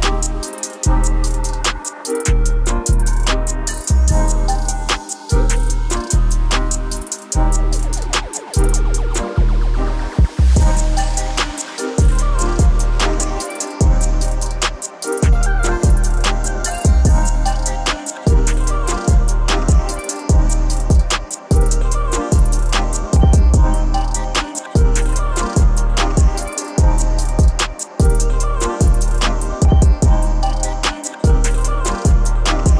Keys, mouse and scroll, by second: 4.7 middle click, 6.4-10.9 drag, 13.2 click, 18.1-21.1 drag, 21.8-22.7 typing, 23.8-26.9 typing, 24.3 click, 27.1 click, 29.1-29.8 typing, 31.3-32.5 typing, 31.3 click.